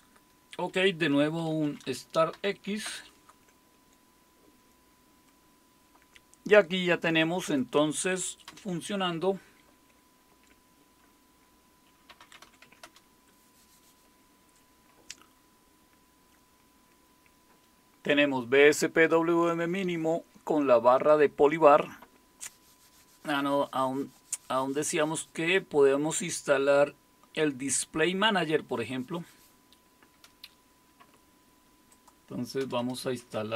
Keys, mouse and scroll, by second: 0.9-2.8 typing, 2.9 Return, 7.4 click, 8.5 super+Return, 11.9-12.9 typing, 31.9-33.0 drag, 32.7 Return, 32.8 Return, 33.1-33.5 typing.